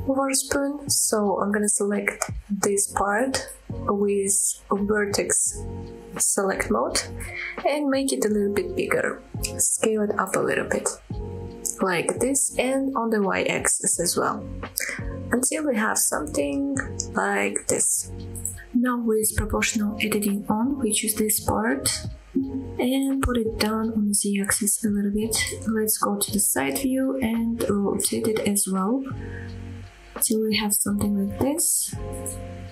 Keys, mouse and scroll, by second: 0.5 click, 1.1 click, 1.8 click, 3.7 s, 6.6 click, 6.9-7.2 scroll down 1, 7.4 shift+middle click, 7.9 s, 9.8 click, 10.1 s, 11.1 y, 14.4 click, 14.7 scroll down 1, 15.0-16.1 middle drag, 16.2-16.6 scroll up 2, 16.6-18.0 middle drag, 18.1 Tab, 18.5 scroll down 1, 18.8 middle drag, 19.1 ctrl+z, 19.3 click, 19.9 middle click, 21.0 middle click, 21.3 g, 21.7 z, 23.8 shift+click, 25.3 KP_1, 26.6 KP_3, 27.2-27.6 scroll up 2, 28.3 r.